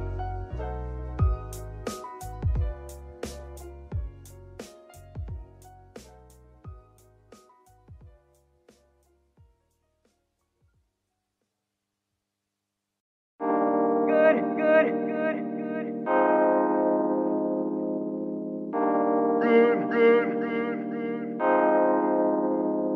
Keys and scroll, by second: 2.7 g, 3.4 shift+s, 6.5 Tab, 7.5 Tab, 7.8 s, 9.3 Tab, 9.9 shift+s, 13.9 KP_7, 14.2 KP_0, 14.8 KP_1, 16.8 shift+s, 17.9 shift+n.